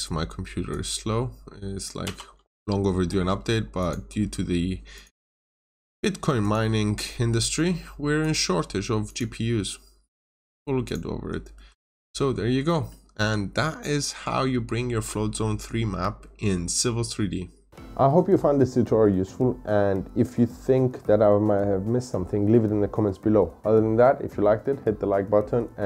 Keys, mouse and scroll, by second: 2.0 b, 3.7 click, 5.6 Escape, 6.3 click, 10.2-10.8 scroll up 1, 10.8 click, 11.5 Escape, 11.8 scroll up 1, 12.4 scroll down 1, 12.6 middle click, 13.3-13.9 scroll up 1, 13.9 middle click, 14.3 scroll down 1.